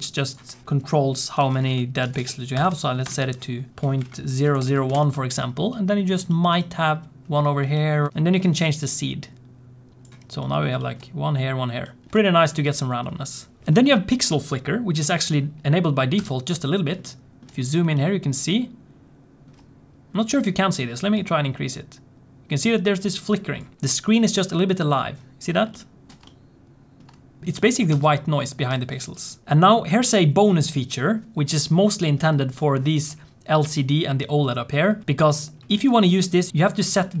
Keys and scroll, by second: 27.4 space, 27.8 space, 28.7 space.